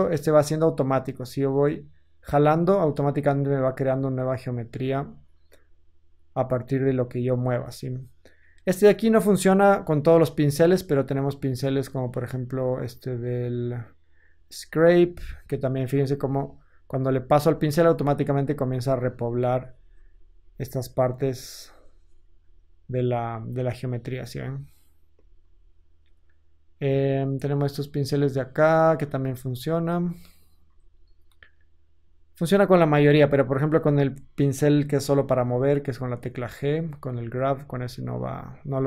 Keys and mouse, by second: 9.5 shift+click, 22.5 Tab, 25.1 Tab, 30.1-35.3 drag, 30.5 ctrl+z, 33.3 ctrl+z, 34.9 f, 35.3-36.7 middle drag, 35.4 g, 36.7-38.8 drag.